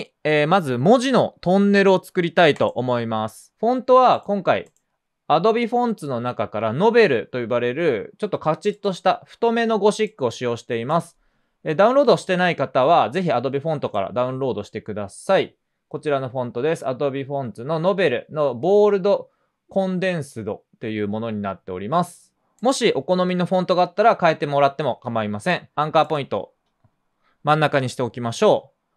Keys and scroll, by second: 2.8-4.4 typing.